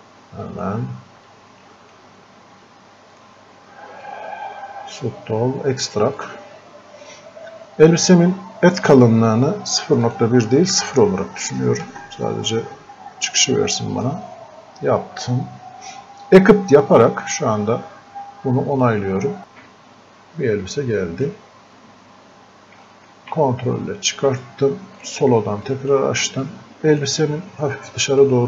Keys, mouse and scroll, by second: 10.1 click, 14.0 click, 18.8-28.2 drag, 28.2-28.4 drag.